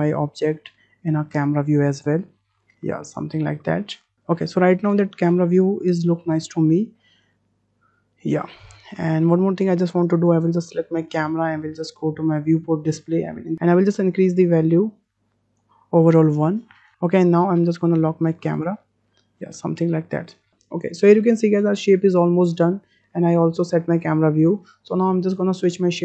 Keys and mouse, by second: 0.2 shift+middle click, 0.9-1.3 shift+middle drag, 2.1-3.4 drag, 3.7 w, 6.4-6.9 ctrl+drag, 7.1 shift+click, 10.3 click, 12.3 click, 13.5 ctrl+z, 14.7 click, 18.5 drag, 19.8-20.3 shift+drag.